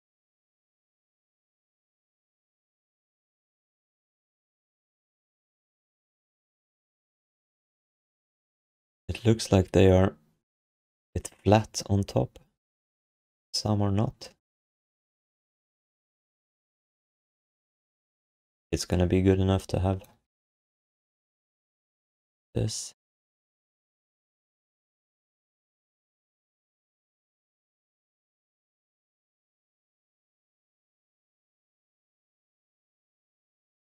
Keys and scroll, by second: 20.3 f, 25.0 6, 32.1 1, 32.5 q.